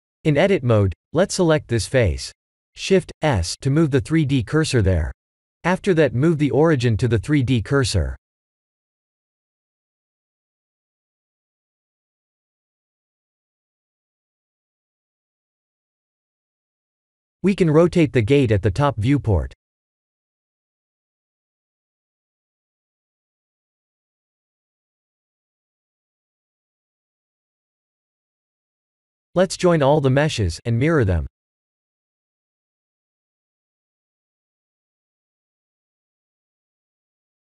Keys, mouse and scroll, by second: 0.3 Tab, 0.7 middle click, 1.6 shift+z, 2.2 middle click, 2.9 3, 3.6 click, 4.5 middle click, 7.1 shift+s, 9.6 Tab, 11.1 click, 16.4 click, 17.3 KP_7, 18.2 r, 23.4 shift+click, 24.9 middle click, 27.2 click, 27.3 click, 30.9 shift+click, 34.2 ctrl+j, 36.3 middle click.